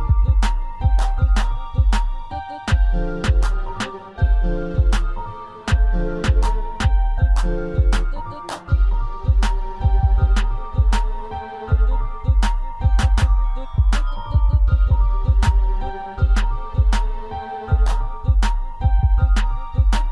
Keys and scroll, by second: 2.3 Return, 7.2 ctrl+t, 15.0 Return, 17.9 ctrl+j.